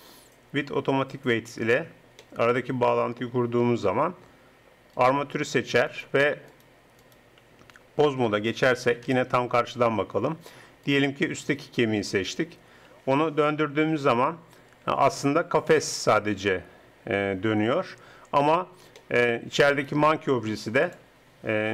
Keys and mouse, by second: 2.3 click, 2.9-5.0 middle drag, 5.0-8.9 drag, 8.0 ctrl+Tab, 9.1 KP_1, 10.8 click, 12.6 click, 12.9 r, 19.0 click, 19.4-21.7 drag, 20.8 right click.